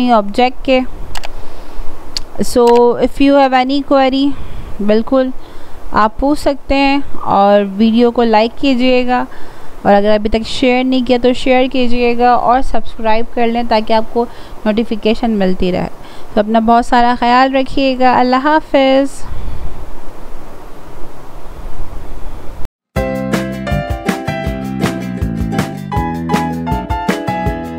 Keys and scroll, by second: 7.5 ctrl+z.